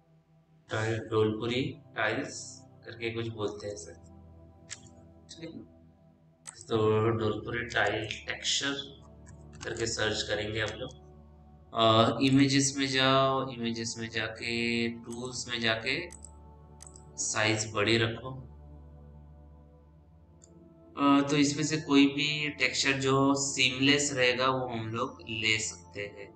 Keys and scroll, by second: 3.5 Return, 8.0-9.8 typing.